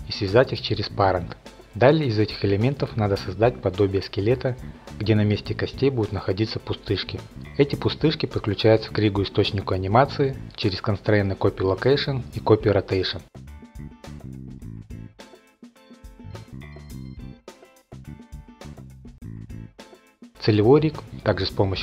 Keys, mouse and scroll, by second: 0.4 ctrl+p, 1.2 click, 1.3 scroll, 1.4-6.3 typing, 1.8 click, 2.0 click, 2.3 click, 3.0 click, 3.2 click, 3.5 click, 3.7 click, 3.8 click, 4.2 click, 4.3 middle click, 4.4 middle click, 4.5 click, 4.8 click, 5.0 click, 5.2 click, 5.4 click, 5.6 click, 5.9 click, 6.0 shift+middle click, 6.1 click, 6.5 click, 6.8 middle click, 6.9 middle click, 7.3 middle click, 7.9 click, 8.5 click, 9.0 click, 9.3 click, 10.7 click, 11.4-12.1 typing, 12.2 Return, 13.2 click, 13.4 click, 13.8 click, 14.2 click, 14.8 click, 15.3 click, 15.8-16.2 typing, 16.8 click, 17.6 F8, 18.3-18.7 scroll, 19.1 middle click, 19.3 middle click, 20.6 F8, 21.6 middle click, 21.6 middle click.